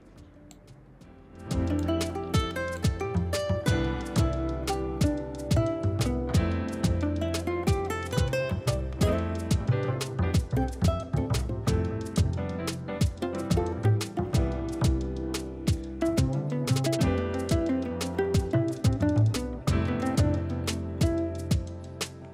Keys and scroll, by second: 6.0 ctrl+i, 6.8 ], 6.8 [, 12.9 ctrl+i.